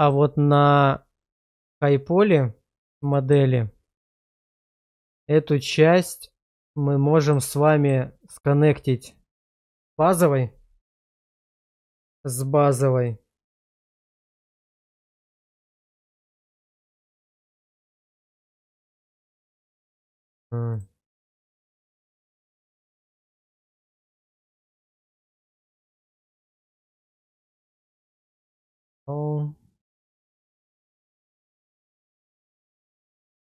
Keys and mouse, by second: 0.0 click, 1.5 click, 3.1 shift+middle click, 4.4 click, 6.8-7.3 middle drag, 7.7 shift+middle drag, 13.0-14.2 middle drag, 15.2 middle click, 16.7 click, 20.7 click, 22.3 click, 24.0 click, 25.2 click, 26.3 click, 29.5-31.8 drag, 33.1 shift+middle drag.